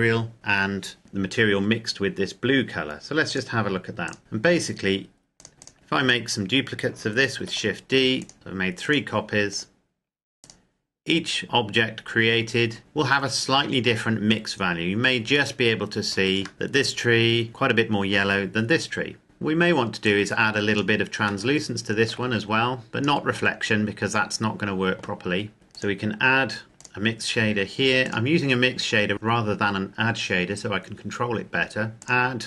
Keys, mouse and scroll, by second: 0.3 middle click, 1.7-3.4 scroll up 1, 3.4 click, 4.2-5.1 scroll down 1, 5.4 click, 5.7-6.7 scroll down 1, 7.2 shift+d, 8.0 click, 8.3 shift+d, 8.6 click, 11.6-12.7 scroll up 1, 12.8 shift+middle click, 16.5 shift+middle click, 19.2 click, 21.4 shift+middle click, 22.1-22.9 scroll down 1, 22.9 click, 31.9 click.